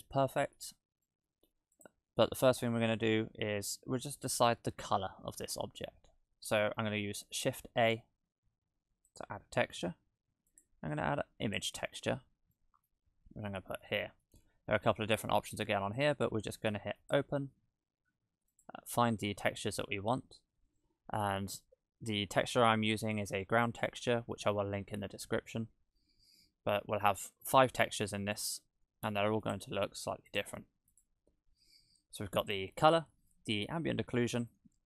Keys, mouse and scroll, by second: 0.7 scroll up 2, 1.0 middle click, 1.7 click, 2.1-2.7 scroll up 1, 7.8 shift+a, 12.5 middle click, 13.1-13.8 scroll up 4, 13.8 middle click, 14.5-15.4 scroll up 3, 15.6-16.6 scroll down 4, 16.6 scroll down 1, 17.0 click.